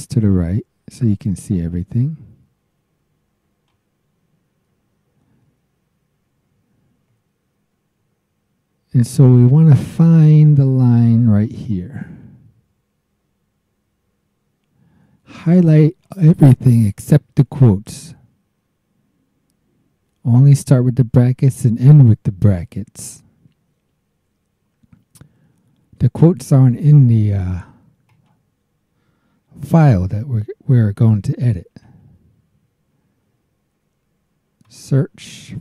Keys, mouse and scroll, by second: 5.5-5.9 scroll down 2, 6.4 scroll down 2, 7.1-7.5 scroll down 2, 8.0 scroll down 2, 11.4-16.2 drag, 26.7 right click, 28.0 click, 31.7 alt+Tab, 34.6 click, 35.4 click.